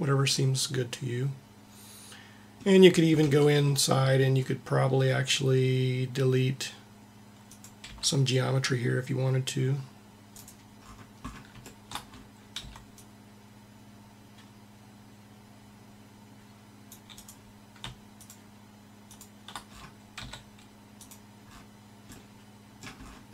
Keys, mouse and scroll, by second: 0.3 middle click, 3.2 Tab, 7.8 c, 8.0 c, 10.8 middle click, 12.5 c, 18.1-20.1 drag, 20.1 x.